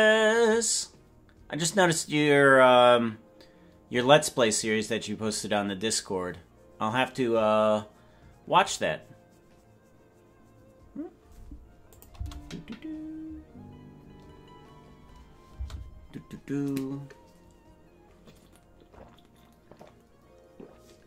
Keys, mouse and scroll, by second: 11.9 click, 12.4 space, 15.6 space.